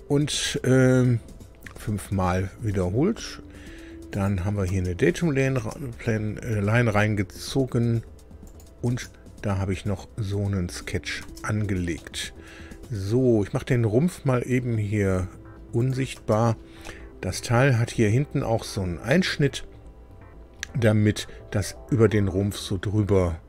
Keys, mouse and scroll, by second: 1.2-1.5 scroll down 2, 4.1 click, 4.6 space, 5.5 space, 8.4 click, 8.9 space, 11.9-13.0 middle drag, 14.5-15.1 scroll up 1, 15.7 click, 16.2 space, 16.8 middle click, 17.2 click.